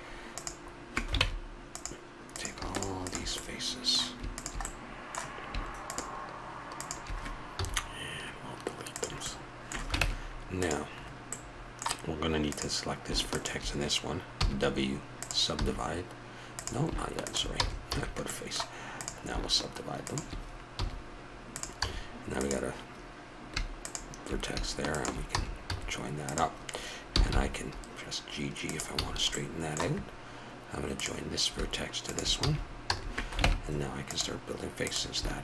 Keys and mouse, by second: 1.2 ctrl+Tab, 3.5-5.6 middle drag, 7.6 x, 9.2 middle click, 10.0 ctrl+Tab, 14.4 w, 14.5 click, 15.6 a, 16.6-18.3 drag, 17.5 f, 17.9 a, 18.3 middle click, 18.9 click, 20.8 w, 21.8 a, 25.3 f, 25.7 a, 26.9 right click, 27.1 g, 28.0-29.0 drag, 29.0 a, 30.9-32.4 drag, 32.4 f, 32.9 a, 33.4 ctrl+Tab, 34.8-35.4 drag.